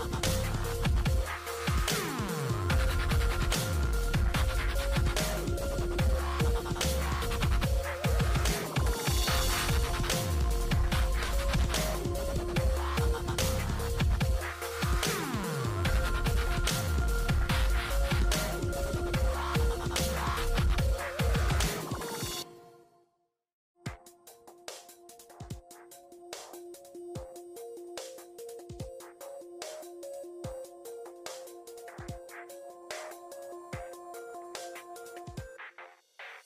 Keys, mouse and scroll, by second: 1.0 click, 1.0 4, 3.9-17.1 drag, 17.0-18.0 typing, 17.9-21.1 drag, 20.8-23.8 typing, 21.7 Tab, 24.5-32.8 drag, 28.5 typing, 32.8 click, 35.6 typing.